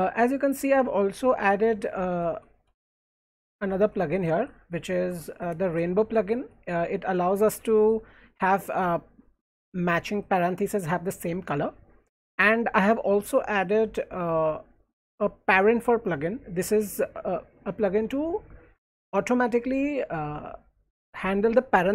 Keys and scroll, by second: 1.3-7.2 typing, 12.2 j, 12.4 j.